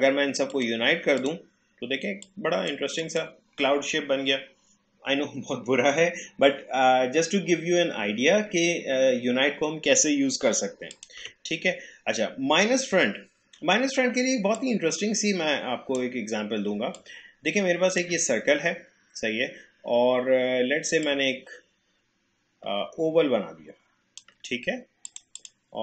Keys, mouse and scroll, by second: 10.9 click, 11.2 Delete, 14.5-17.0 drag, 21.0-25.8 drag.